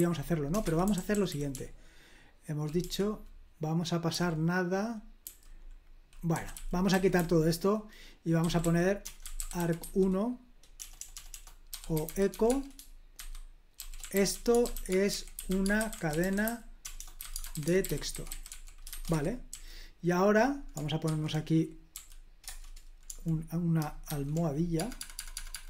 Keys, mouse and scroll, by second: 0.0-4.1 typing, 5.2-20.0 typing, 21.0-22.4 typing, 24.0-25.6 typing.